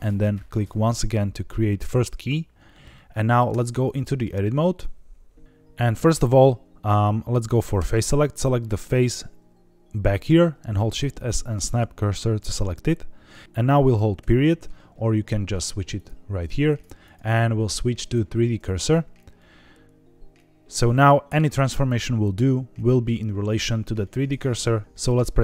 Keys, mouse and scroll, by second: 0.5 click, 2.9 middle click, 3.4 Tab, 3.8 shift+middle click, 4.5-5.4 scroll up 4, 5.4 scroll down 2, 5.7 middle click, 7.7 3, 8.6 click, 10.7 shift+s, 15.9 click, 16.9-18.1 drag, 19.3-21.0 middle drag, 23.9 middle click, 24.8 click, 24.8 a, 24.9 middle click.